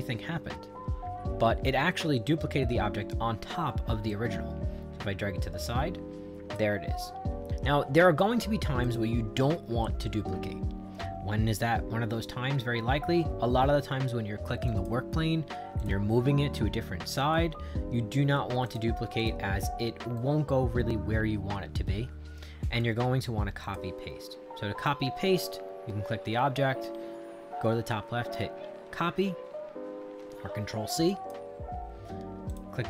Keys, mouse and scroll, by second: 4.0-6.5 drag, 8.8 click, 14.7 click, 15.8 click, 18.6 click, 19.2 click, 20.1-22.8 right drag, 23.6 click, 31.1 click, 32.5 click.